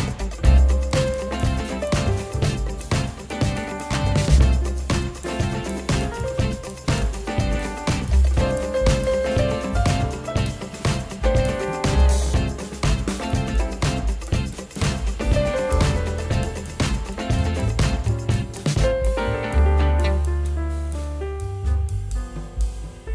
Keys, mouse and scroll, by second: 1.7 double click, 6.7 double click, 6.8 1, 20.9 double click.